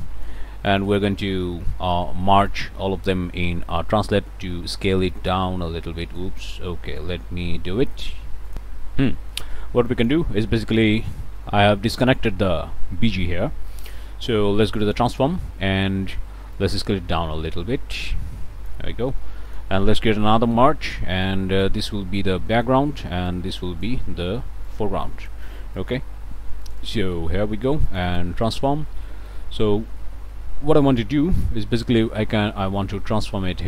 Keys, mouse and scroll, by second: 0.7 ctrl+click, 2.3 click, 5.1-6.4 drag, 6.7 ctrl+z, 8.5 click, 9.2 click, 9.9 click, 10.8-11.8 drag, 12.0 click, 13.7 click, 14.7 click, 16.6-18.9 drag, 19.1 click, 20.5 m, 21.6-22.9 drag, 23.3 click, 24.7 click, 25.8 click, 26.2 1, 26.6 click, 27.9 click, 28.7 scroll up 2, 28.9 scroll down 2, 28.9 scroll up 2, 29.1 click, 29.6 scroll up 2, 30.8-33.6 drag.